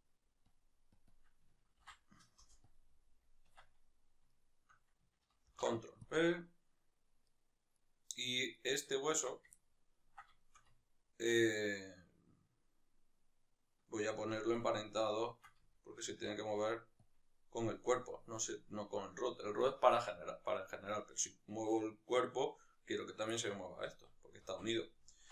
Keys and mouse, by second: 0.5-1.0 drag, 2.4-4.3 drag, 2.5 Return, 3.6 Tab, 4.3-6.2 shift+right drag, 6.2 ctrl+p, 7.3-9.4 right drag, 9.4 Tab, 9.6-13.8 ctrl+middle drag, 13.8-17.2 right drag, 17.2 ctrl+p, 21.2-23.4 right drag, 23.4-25.3 shift+middle drag, 24.1 z.